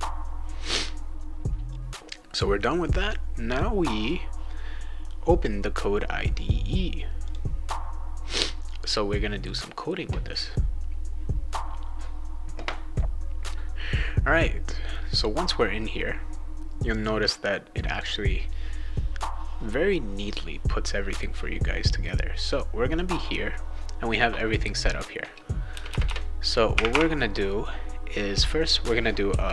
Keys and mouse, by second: 3.5 click, 7.2 click, 16.8 click, 17.9 click, 22.4 click, 22.9 click, 25.7 Return, 25.9 Return, 26.0 Return, 29.0-29.5 typing.